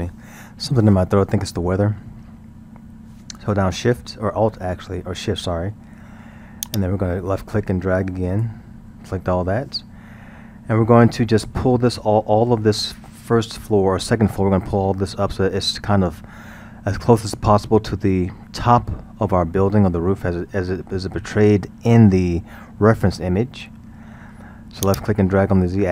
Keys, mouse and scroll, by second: 6.6 shift+click, 10.4 scroll, 21.2-22.1 middle drag, 22.1-22.8 scroll, 22.8-24.9 middle drag, 24.9-25.9 drag.